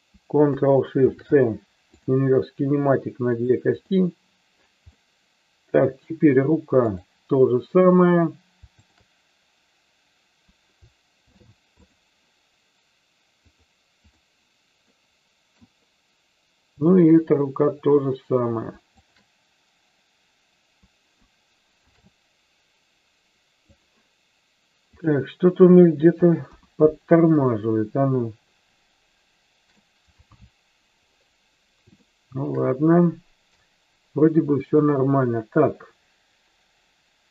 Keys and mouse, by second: 1.0 ctrl+shift+c, 3.4 click, 5.0-6.2 middle drag, 6.7 click, 11.1 ctrl+shift+c, 15.0 middle click, 16.7-18.2 drag, 19.0 shift+click, 21.7 ctrl+shift+c, 25.0 click, 26.4 KP_1, 27.5-29.9 shift+middle drag, 32.0-32.5 shift+middle drag, 34.7-37.3 middle drag.